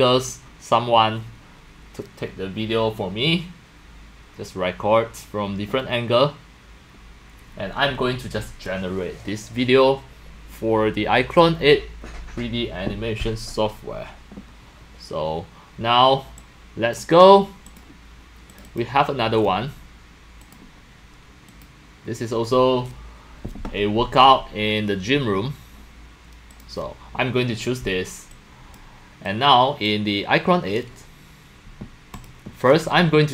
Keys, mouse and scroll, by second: 17.0-17.7 drag, 18.6 click, 18.8 click, 19.3 drag, 20.1-25.0 drag, 25.2-26.5 drag, 28.3 click, 29.3 click, 29.8 click, 32.1 click, 32.4 drag.